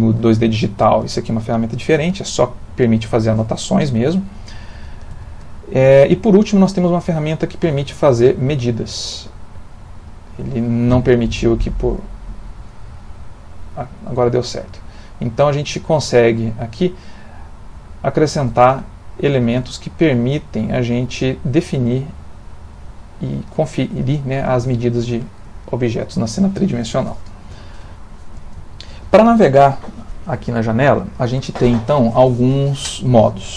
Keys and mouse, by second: 1.8 Escape, 3.8 ctrl+z, 4.2 ctrl+z, 4.4 ctrl+z, 4.6 ctrl+z, 4.8 ctrl+z, 5.1 ctrl+z, 6.4 click, 8.7 click.